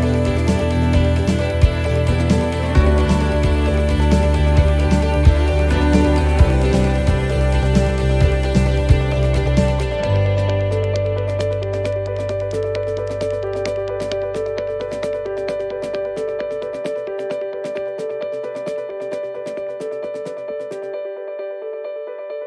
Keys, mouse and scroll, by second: 0.3 middle click, 0.6-1.1 scroll down 3, 1.2 shift+middle click, 1.6 scroll up 2, 2.3 shift+middle click, 4.0 shift+middle click, 4.4-4.7 scroll up 2, 5.0 right click, 5.4 shift+right click, 5.9 right click, 6.4 right click, 7.4 click, 9.3 click, 17.2 click, 17.2 middle click, 17.5-18.1 scroll down 4, 18.2 shift+middle click, 18.9 middle click, 20.0 shift+middle click, 20.7 scroll up 1, 22.1 ctrl+r.